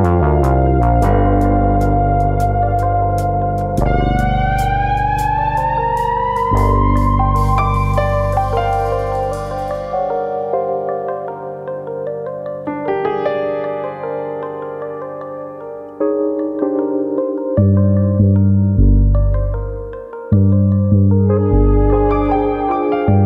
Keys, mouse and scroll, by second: 1.1 click, 1.6 click, 2.6 click, 3.5 g, 4.4 click, 5.0 click, 5.6 middle click, 6.3 shift+middle click, 6.7 middle click, 6.9 a, 7.7 click, 9.6 3, 10.0 click, 10.8 shift+click, 11.4 click, 15.7 2, 16.5 click, 18.3 middle click, 18.8 click, 19.3 click, 20.8 alt+click, 20.9 alt+click, 21.5 click, 22.6 middle click, 23.1 shift+middle click.